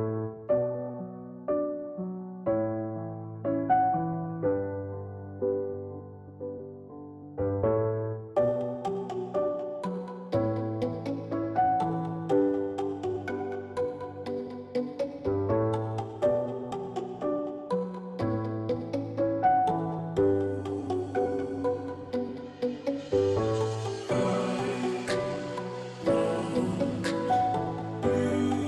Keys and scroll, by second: 0.0-20.7 typing.